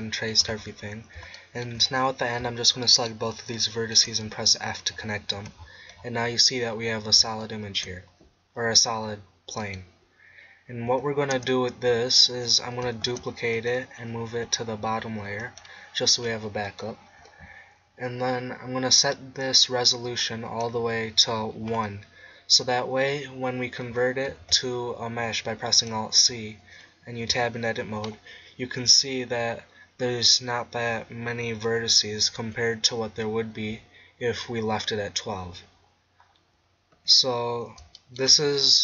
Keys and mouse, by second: 3.0-4.7 middle drag, 4.3 f, 5.3 Tab, 11.3 KP_0, 13.1 shift+d, 13.7-15.7 drag, 14.4 m, 16.7 click, 19.9-21.7 drag, 21.7-23.1 middle drag, 24.4 alt+c, 27.4 Tab, 35.9 middle click, 36.9 Tab.